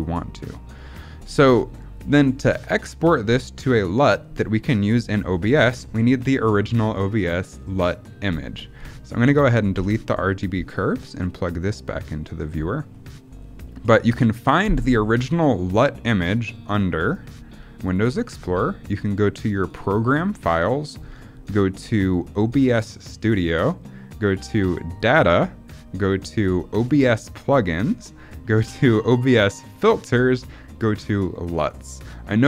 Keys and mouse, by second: 9.1 click, 9.7 Delete, 10.6-11.4 drag.